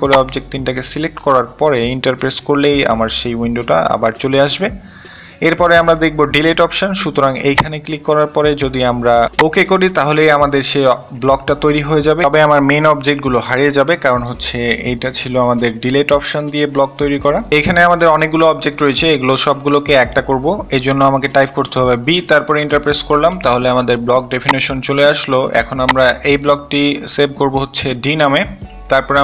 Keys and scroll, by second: 0.8 Return, 19.3 typing, 19.6 Return, 22.5-23.3 typing, 28.5 d.